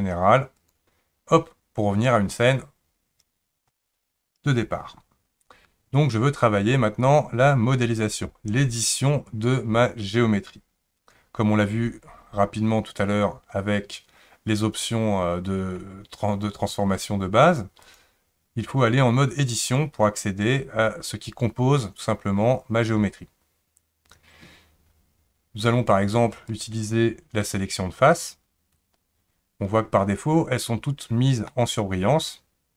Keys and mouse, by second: 17.8-19.7 drag, 26.6 click, 31.5-32.7 middle drag.